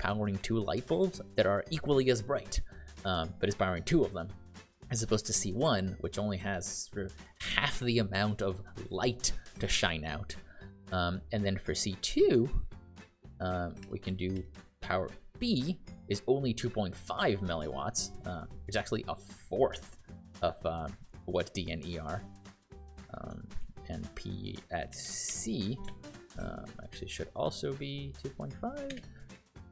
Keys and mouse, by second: 13.3 shift+p, 14.3 ), 14.7 Return, 23.5 shift+p, 24.6-25.7 typing, 25.8 Return, 29.4 Return, 29.4 BackSpace.